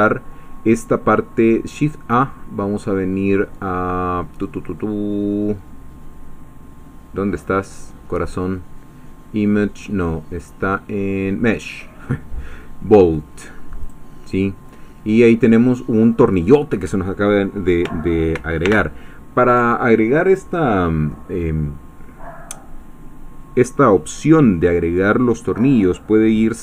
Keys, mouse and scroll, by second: 13.8 click, 14.8-17.8 scroll down 4, 18.6 ctrl+alt+u.